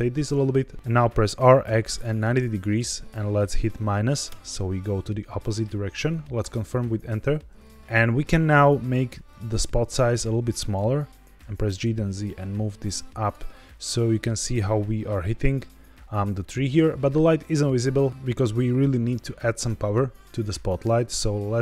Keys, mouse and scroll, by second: 0.7 Escape, 0.7-2.0 typing, 4.2 KP_Subtract, 6.3 KP_Enter, 7.5 g, 7.5 z, 7.6 click, 7.6 z, 9.2-10.7 drag, 11.3 g, 11.5 z, 13.1 click, 13.4 middle click, 14.8-16.1 scroll up 3, 20.6-21.6 drag.